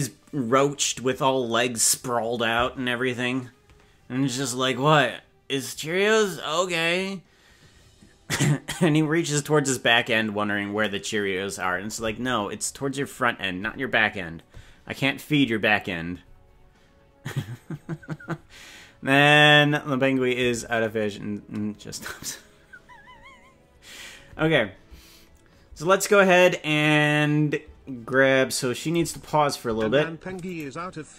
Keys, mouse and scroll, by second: 25.3 scroll up 2, 28.8 click, 28.9 space, 29.7 space, 30.6 right click.